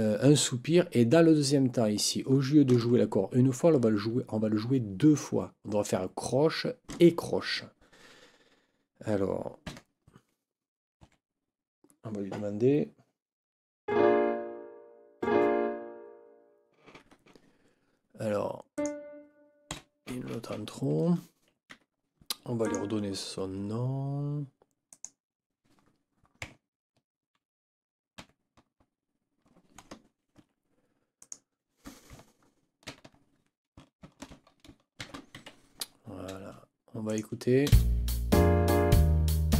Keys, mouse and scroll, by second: 9.6 n, 11.0 KP_4, 17.0 Escape, 18.7 click, 19.7 Delete, 21.7 Escape, 22.6 click, 24.9 click, 28.2 ctrl+b, 30.4 Escape, 31.2 click, 32.9 ctrl+k, 34.0 shift+b, 35.4 Escape, 37.0 click, 37.7 space.